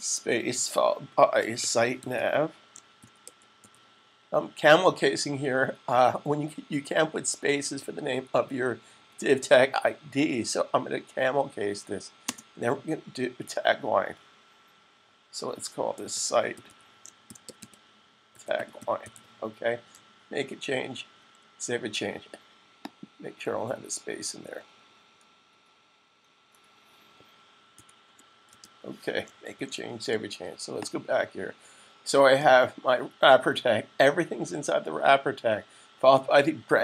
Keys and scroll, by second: 0.8-3.8 typing, 15.6-19.4 typing, 25.2 Right, 27.7-28.4 typing, 29.3 super+s.